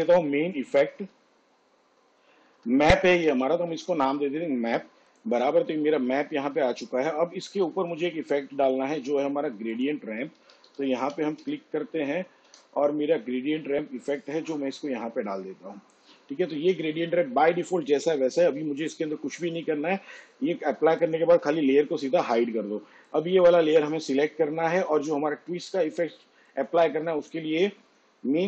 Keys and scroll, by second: 0.0-0.9 typing, 3.2 m, 3.2 a, 3.7 p, 10.5 g, 10.7 r, 11.5 d, 12.5 i.